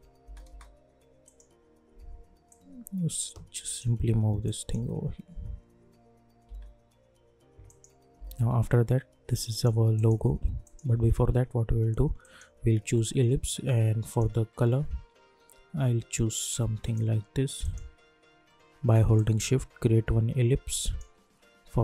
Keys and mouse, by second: 1.2-4.4 drag, 4.7 space, 7.6 click, 8.1 u, 9.4-17.6 drag, 19.1-21.8 shift+drag.